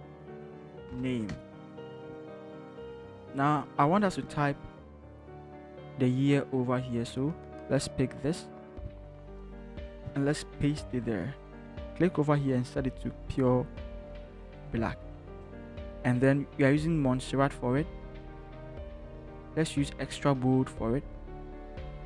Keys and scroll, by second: 0.0 Caps_Lock, 0.4-1.8 typing, 4.8 t, 9.3 ctrl+c, 10.4 ctrl+v.